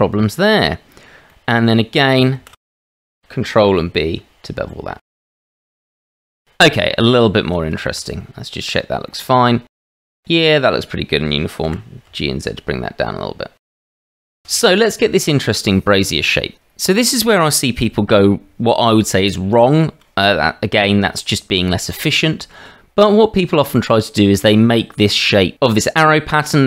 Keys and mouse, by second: 1.2 middle click, 2.4 shift+z, 3.6 ctrl+b, 5.7 middle click, 5.9 shift+middle click, 6.8 Tab, 7.9 shift+z, 9.0 shift+middle click, 11.6 g, 13.7 Tab, 14.0 shift+z.